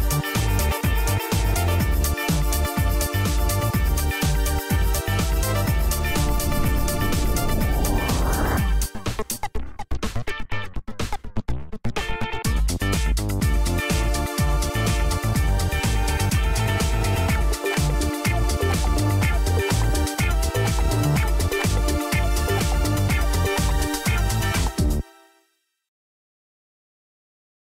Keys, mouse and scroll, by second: 0.7 super+2, 1.6-3.5 typing, 4.0 Return, 7.3-8.4 typing, 8.8 Return, 10.9 click, 12.3-15.1 drag, 15.1 super+Return, 16.7-18.9 typing, 19.6 Return, 23.7-26.0 typing.